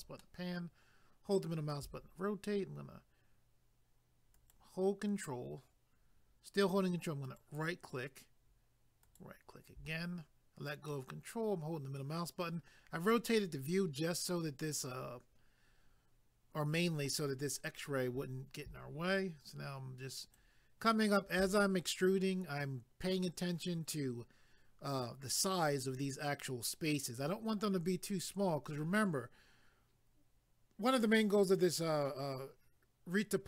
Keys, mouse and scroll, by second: 0.2 middle click, 4.3 ctrl+right click, 7.2 ctrl+right click, 9.0 ctrl+right click, 10.9 middle click, 20.2 ctrl+right click.